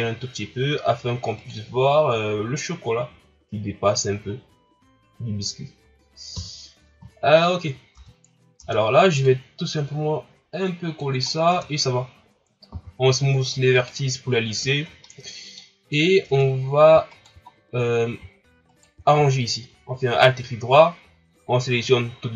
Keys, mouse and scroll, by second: 6.4 KP_3, 7.2-8.0 shift+scroll up 2, 8.0 Tab, 8.6 Tab, 9.2-11.3 drag, 11.3 scroll down 1, 11.5 Tab, 12.7 w, 14.7-15.1 shift+scroll down 3, 15.1-16.3 middle drag, 16.3 Tab, 17.1 alt+right click, 17.5-18.0 scroll down 1, 18.7 alt+right click.